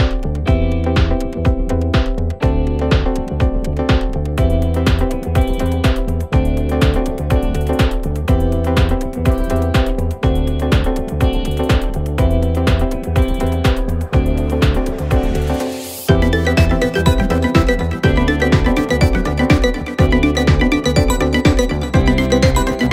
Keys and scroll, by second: 5.2 Escape, 13.1 4, 17.0 3.